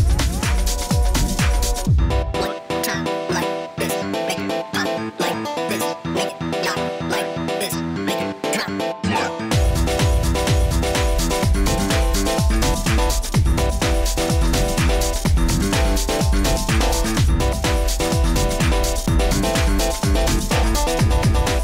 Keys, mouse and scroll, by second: 0.9 click, 4.9 click, 7.8 click, 9.2 click, 15.6 click, 19.1 click, 21.1 click.